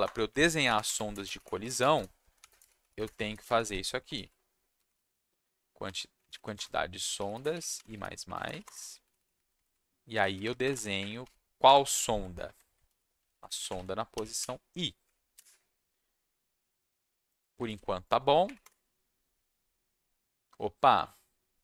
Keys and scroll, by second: 0.0 Return, 0.4-5.6 typing, 5.8 Down, 6.2 Down, 6.3 Down, 6.5 Return, 6.9-8.5 typing, 8.6 Return, 9.0 Down, 9.1 Down, 10.1 ctrl+x, 10.6 BackSpace, 10.7 BackSpace, 10.9 Up, 11.6 Tab, 12.8 ctrl+v, 13.2 Left, 13.3 Left, 13.4 Left, 13.6 Left, 13.7 Left, 14.4 i, 15.3 Escape, 17.6 ctrl+shift+s, 18.4 Up, 18.6 Return.